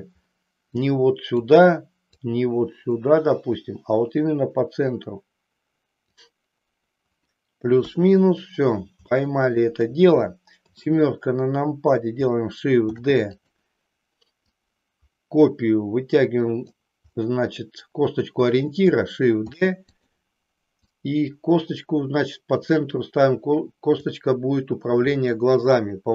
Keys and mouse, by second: 0.6 click, 2.3-6.2 drag, 7.8 KP_3, 9.2 shift+middle click, 12.9 shift+d, 14.4-16.7 drag, 19.5 shift+d, 19.9 click, 20.8-24.0 drag.